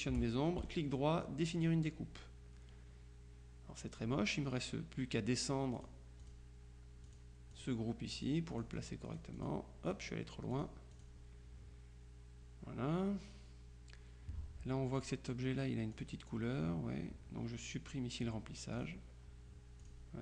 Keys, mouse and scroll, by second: 0.7 right click, 1.7 click, 5.9 click, 7.1-8.2 drag, 10.6 click, 15.1 click, 16.1 click, 18.8 click, 19.9 click.